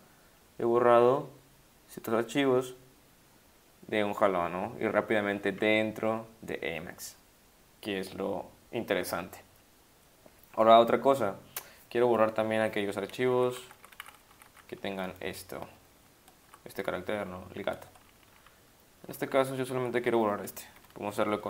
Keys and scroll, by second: 13.4 Up, 13.5 Up, 13.6 Up, 13.8 Up, 13.9 Up, 14.0 Down, 14.3 Up, 14.5 Up, 15.1 ctrl+shift+Right, 16.0 shift+Right, 16.4 Left, 16.8 shift+Right, 17.2 shift+Left, 18.0 Left, 18.1 Left, 18.3 Left, 19.1 Left.